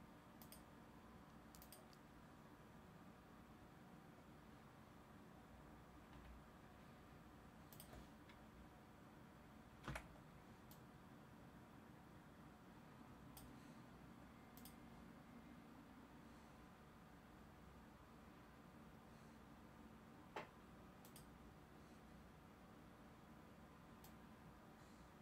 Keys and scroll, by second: 9.8 t.